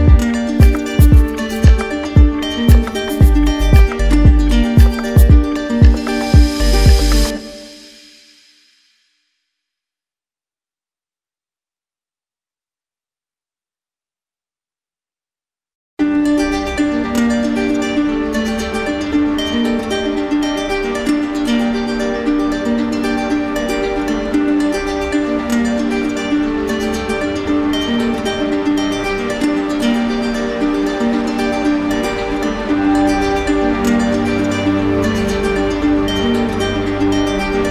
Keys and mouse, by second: 1.1 alt+right click, 2.7 ctrl+click, 3.6 ctrl+w, 5.3 ctrl+click, 6.1 ctrl+w, 7.3 ctrl+click, 8.1 ctrl+w, 9.9 right click, 10.3 shift+right click, 11.4 alt+right click, 12.0 alt+right click, 14.1-15.2 drag, 19.8-20.9 drag, 26.7-27.8 drag, 29.4-30.5 drag, 34.8-35.9 drag, 36.5-37.6 drag.